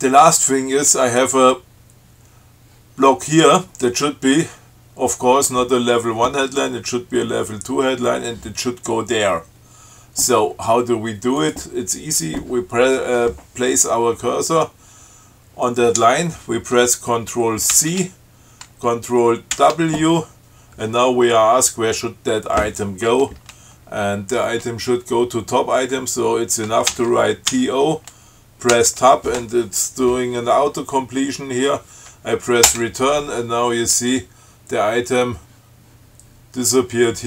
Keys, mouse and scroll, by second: 11.6 click, 17.9 ctrl+c, 19.7 ctrl+w, 27.1 shift+t, 27.7 o, 28.9 Tab, 32.8 Return.